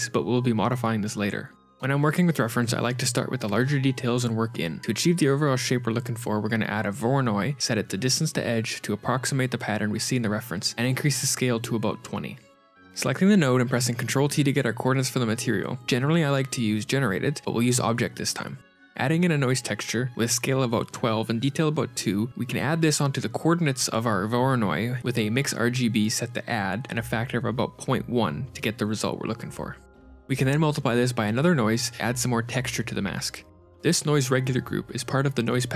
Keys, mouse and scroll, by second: 6.3 middle click, 6.3 scroll up 4, 6.3 shift+a, 7.2 click, 9.2 ctrl+shift+click, 11.6 click, 12.8 x, 13.5 click, 14.1 ctrl+t, 14.9 g, 18.0 click, 18.7 middle click, 18.7 shift+a, 19.8 click, 23.3 ctrl+shift+click, 24.6 click, 25.3 click, 27.0 click, 27.1 ctrl+shift+click, 29.2 ctrl+shift+click, 30.0-31.2 scroll up 9, 30.6 shift+a, 31.9 shift+click, 33.5 click, 34.9 click, 35.4 Tab.